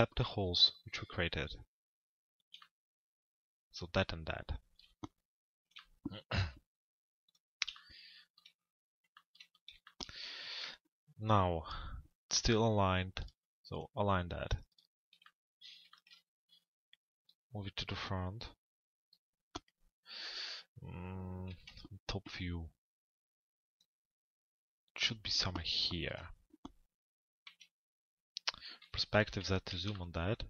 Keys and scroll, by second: 21.1 t, 21.6 z, 25.7 p, 27.5 f, 28.8 p, 29.3 z.